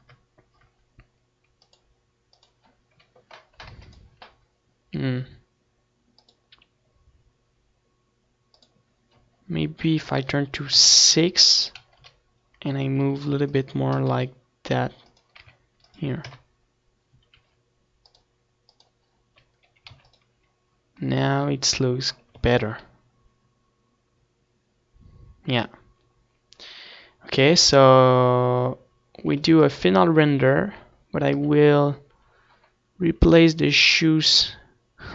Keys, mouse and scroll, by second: 1.5 ctrl+s, 4.0-5.8 drag, 9.1 click, 9.9 KP_1, 11.1 r, 11.6-15.7 drag, 12.0 g, 13.4 r, 14.3 KP_0, 16.1-17.8 drag, 17.9 ctrl+s, 20.4 ctrl+s, 27.4 ctrl+s, 29.5 KP_3, 33.8-35.1 drag.